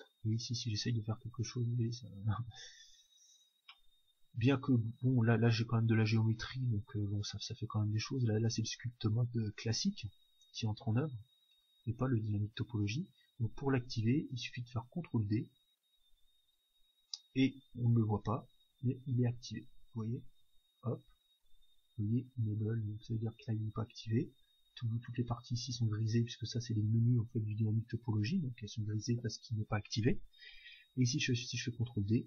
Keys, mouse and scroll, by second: 3.3-7.8 middle drag, 3.3-6.1 scroll up 1, 6.1-8.2 drag, 11.5-13.9 drag, 15.5 ctrl+d, 18.5-22.1 drag, 31.5 ctrl+d.